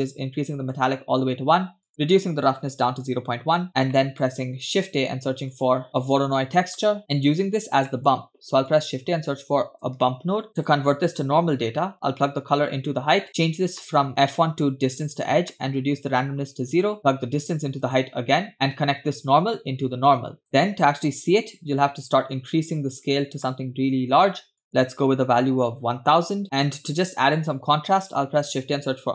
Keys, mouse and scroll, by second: 0.1 click, 1.8-3.5 drag, 3.9 scroll down 1, 4.0 middle click, 4.7 shift+a, 7.6-7.9 scroll up 2, 7.9 middle click, 8.3 shift+a, 12.3-13.3 drag, 13.3 middle click, 13.4-13.8 scroll up 2, 13.8 middle click, 14.0 scroll up 1, 14.3-15.2 drag, 15.5 middle click, 16.2 click, 17.0-18.0 drag, 17.0 scroll down 2, 18.5-20.5 drag, 20.5 middle click, 20.7-21.6 scroll up 3, 21.6-23.3 drag, 24.6-26.7 drag, 26.3 0, 26.4 scroll down 1, 27.6 shift+a.